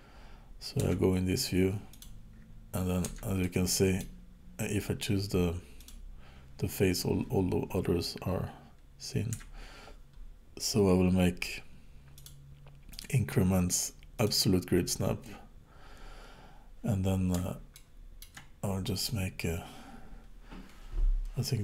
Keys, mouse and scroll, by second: 0.8 KP_1, 1.9 click, 3.1 Tab, 3.4 middle click, 5.8 click, 9.3 KP_1, 12.1 click, 16.9-17.3 scroll up 2, 17.7 shift+middle click, 19.1 click.